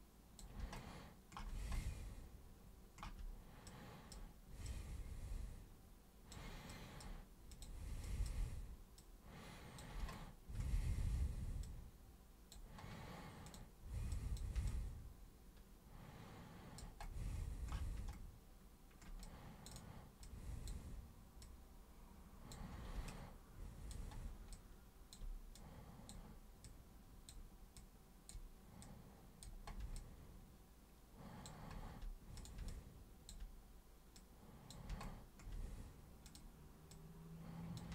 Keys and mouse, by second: 3.7-4.1 super+drag, 4.7 super+click, 6.7 super+drag, 7.5 super+click, 8.0 super+drag, 9.0 super+click, 11.6 super+click, 13.5 super+click, 14.1 super+click, 14.7-16.8 alt+super+drag, 17.0 alt+super+click, 19.2-19.6 super+drag, 19.7 super+click, 20.2-20.6 super+drag, 21.4 super+click, 23.0 alt+super+click, 24.5 alt+super+click, 25.6-26.1 super+drag, 26.6 super+click, 27.8-28.3 super+drag, 28.8 super+click, 30.0-31.4 alt+super+drag, 32.4 super+drag, 32.7-33.3 alt+super+drag, 34.1 super+click, 36.3 super+click, 36.9 super+click.